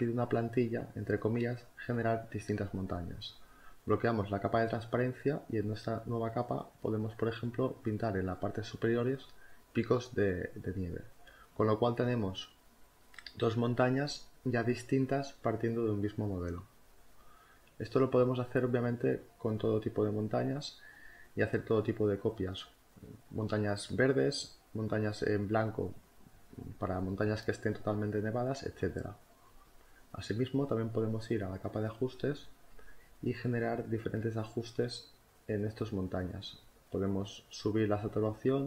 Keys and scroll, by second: 4.1 space, 23.9 ctrl+alt+z.